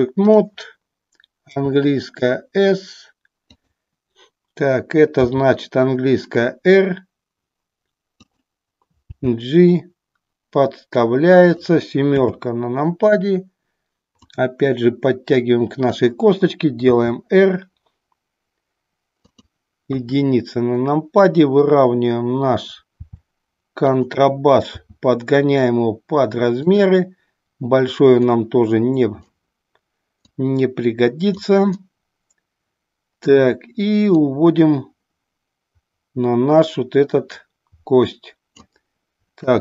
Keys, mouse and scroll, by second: 0.3 click, 1.5 s, 3.6 click, 5.1 r, 9.2 g, 14.2-16.1 drag, 17.0 r, 23.0 r, 24.0 click, 24.9 s, 26.7 click, 28.3-29.4 drag, 30.4-31.5 drag, 31.8-33.5 middle drag, 34.2-38.8 drag.